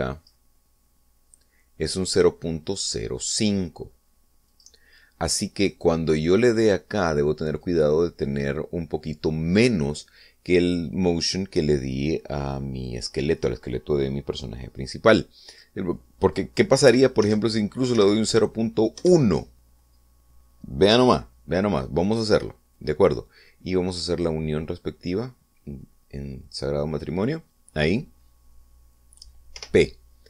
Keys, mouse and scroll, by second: 1.2 click, 5.6 click, 6.8 right click, 8.7 click, 16.6 click, 18.0 Right, 18.4 BackSpace, 19.1 1, 20.1 Return, 24.9 middle click, 25.9-28.3 drag.